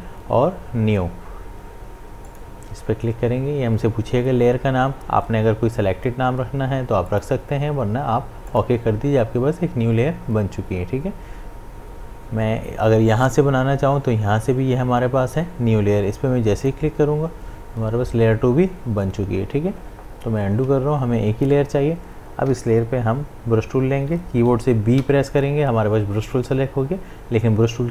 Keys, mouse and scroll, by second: 2.3 click, 7.1 click, 16.6 click, 20.2 click, 20.5 ctrl+z, 25.0 ctrl+z, 27.1 b.